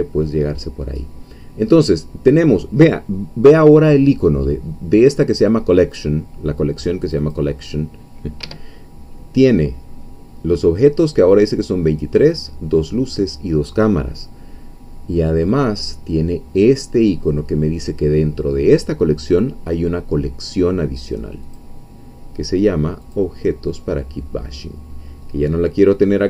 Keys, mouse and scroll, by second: 7.1 click, 8.4 Escape, 21.5 click, 23.1 click.